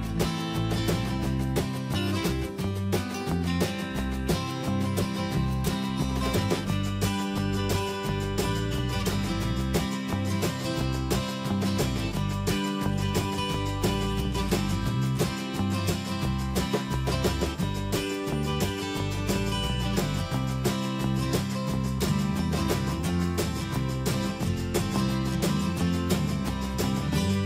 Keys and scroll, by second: 3.1 ctrl+a, 4.1 ctrl+shift+,, 4.7 ctrl+Return, 6.1 Return, 6.5 ctrl+shift+,, 12.2 alt+Right, 13.7 ctrl+Return, 15.8 ctrl+t, 21.1 ctrl+z, 27.1 Return.